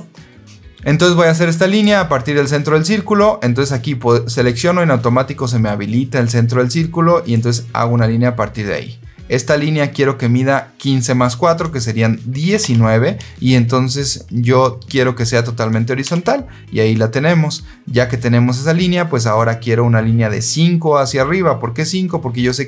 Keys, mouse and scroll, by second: 1.6 click, 7.2 click, 12.3 KP_1, 12.5 KP_9, 16.0 KP_Enter.